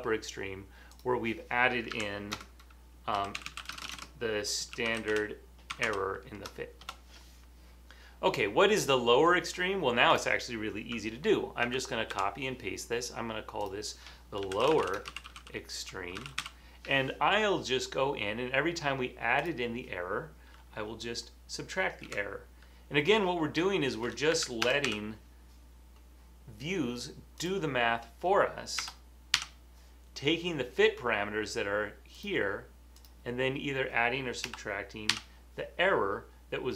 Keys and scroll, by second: 2.9-7.3 typing, 9.3-10.1 typing, 11.7 super+c, 12.2 super+v, 14.3-16.9 typing, 22.2 Left, 24.5 Right, 24.6 BackSpace, 24.8 -, 29.0 BackSpace, 34.6 BackSpace.